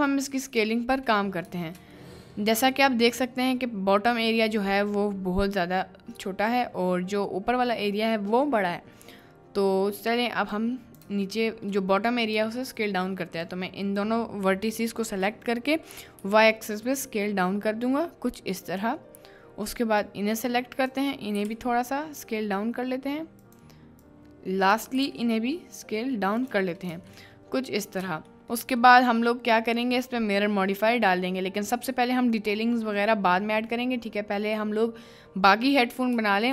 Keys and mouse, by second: 2.0 right click, 2.3 middle click, 4.6 middle click, 6.8 middle click, 8.6 middle click, 10.7 click, 11.2 shift+click, 12.7 shift+click, 13.5 click, 16.2 s, 18.7 click, 18.7 y, 20.1 click, 21.3 s, 21.5 y, 23.4 click, 24.3 click, 25.0 s, 25.1 y, 26.4 click, 26.9 Tab, 27.3 middle click, 28.4 shift+middle click, 29.4 middle click, 30.0 middle click, 31.4-31.8 middle drag, 32.3 middle click, 32.7 middle drag, 33.6 middle click.